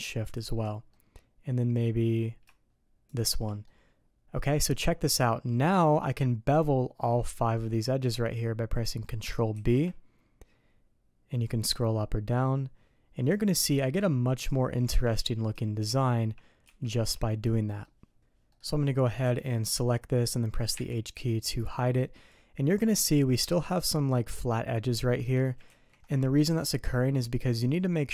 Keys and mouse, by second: 0.2 shift+click, 0.8 middle click, 3.0 shift+click, 3.6 middle click, 4.1 click, 7.5 click, 8.2 click, 9.5 ctrl+b, 14.8 Tab, 17.2 click, 17.6 click, 18.4 middle click, 19.1 click, 19.6 click, 20.7 h, 21.9 middle click, 25.6 ctrl+z, 26.8 click, 27.5 drag.